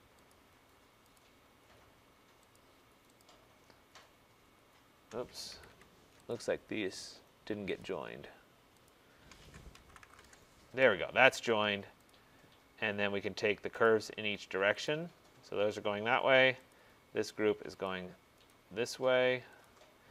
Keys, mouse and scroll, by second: 0.4 shift+click, 1.3 shift+click, 2.6 shift+click, 3.3 shift+click, 5.6 Escape, 5.8 Escape, 6.4 click, 7.9 shift+click, 8.9 shift+click, 9.8-10.3 typing, 12.1 shift+click, 13.9 shift+click, 15.0 shift+click, 16.8 shift+click, 17.9 shift+click, 18.6 shift+click, 19.7 shift+click.